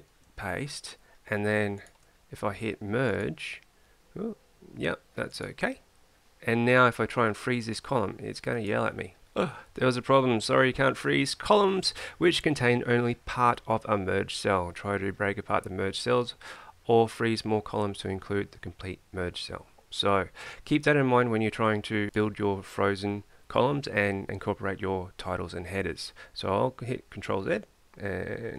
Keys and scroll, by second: 0.2 ctrl+v, 27.2 ctrl+z.